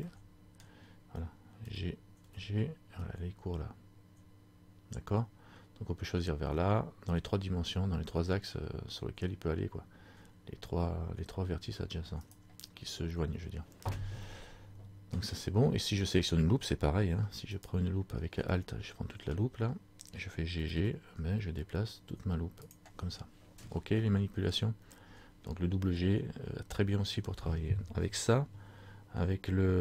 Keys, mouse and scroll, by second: 0.2 middle click, 1.8 g, 12.5 right click, 13.5 scroll down 1, 14.4 scroll down 1, 14.5 middle click, 15.3-15.7 scroll down 1, 17.8 alt+right click, 18.7 middle click, 18.7 scroll up 1, 20.7 g, 22.8 click.